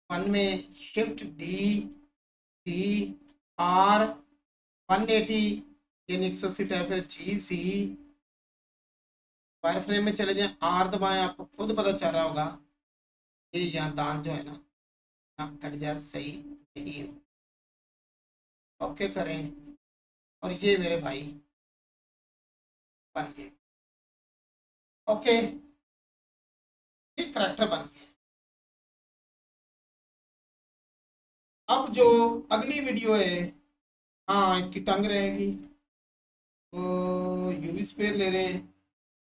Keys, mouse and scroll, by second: 0.2 1, 2.9 click, 4.7 1, 6.2 click, 9.4 3, 11.5 click, 16.8 click, 19.0 1, 20.2-22.0 scroll down 1, 22.8 click, 26.6-27.1 scroll up 1, 27.9 shift+click, 28.7 scroll up 1, 29.6-31.0 alt+drag, 31.0-31.6 scroll down 1, 31.7-33.4 alt+drag, 33.4-33.9 scroll down 1, 34.4-37.9 alt+drag, 38.1 click.